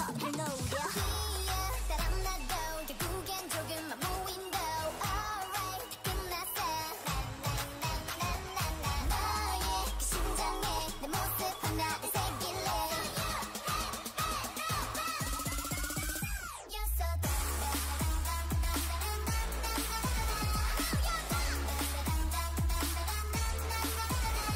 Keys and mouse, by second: 1.2 click, 3.3 Tab, 6.4 Tab, 7.8-9.2 drag, 8.3 g, 9.2 right click, 9.2 KP_3, 9.9 g, 12.0 Tab, 14.1 Tab, 17.2 o, 18.0 e, 19.8 e, 21.5 s, 22.2 e, 23.5 s, 24.1 s.